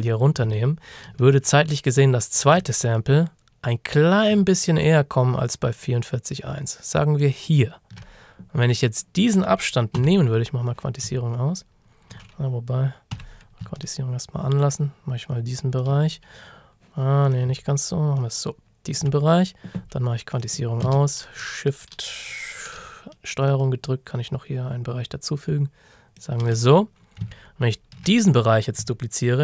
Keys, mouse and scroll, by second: 0.6 ctrl+shift+scroll up 1, 2.6 alt+click, 10.0 j, 13.2 j, 14.6 ctrl+click, 18.2 ctrl+click, 23.5 ctrl+shift+click, 27.4-27.7 ctrl+shift+scroll down 1, 28.1-28.8 scroll down 1.